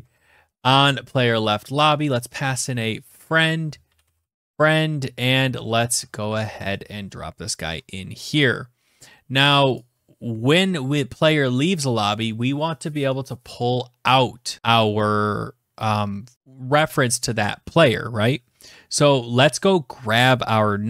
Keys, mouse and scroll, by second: 0.0-0.5 typing, 1.1 Left, 1.7-6.1 typing, 3.0 Tab, 5.6 Tab, 6.2 Return, 7.3-7.6 scroll, 8.8 typing, 9.4 click, 12.7 click, 14.6-16.3 drag.